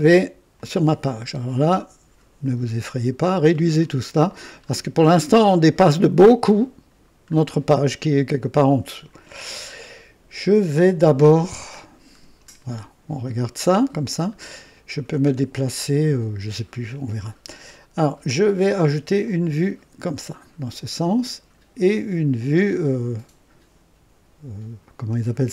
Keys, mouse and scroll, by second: 0.5 click, 2.8-3.7 scroll down 4, 4.1-4.9 scroll down 4, 7.0 scroll down 2, 11.3 scroll down 2, 12.1 scroll down 2, 12.6-13.8 right drag, 15.9-16.6 right drag, 19.2 click.